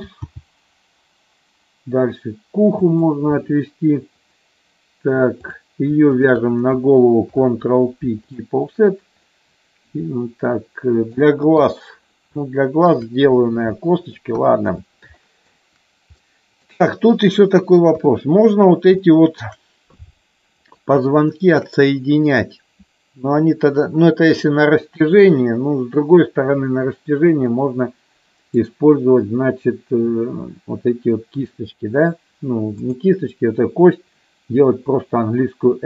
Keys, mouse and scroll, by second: 0.4 g, 2.9 click, 5.6 click, 6.2 shift+click, 7.5 ctrl+p, 9.4-11.3 middle drag, 11.8 KP_3, 12.5 shift+middle click, 14.0 middle click, 15.3 middle click, 16.3 middle click, 18.2 KP_3, 19.2 shift+middle click, 21.3 shift+middle click, 27.7-28.8 middle drag.